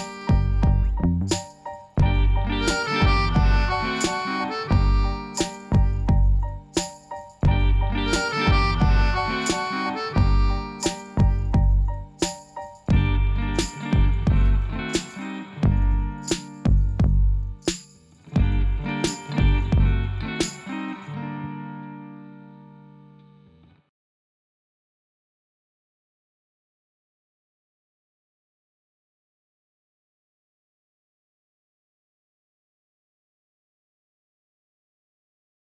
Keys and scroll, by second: 0.3 Return.